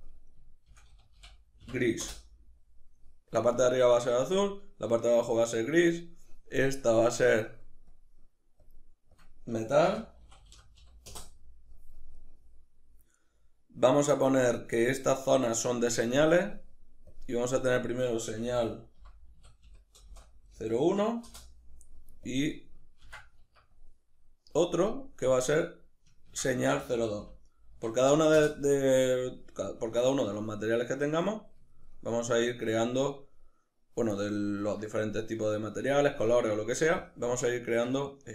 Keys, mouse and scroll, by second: 2.1 Return, 11.2 Return, 12.2-16.4 middle drag, 16.4 click, 17.6-29.2 drag, 21.4 Return, 23.6 Escape, 28.4 Return, 29.2-37.8 middle drag, 37.8 right click.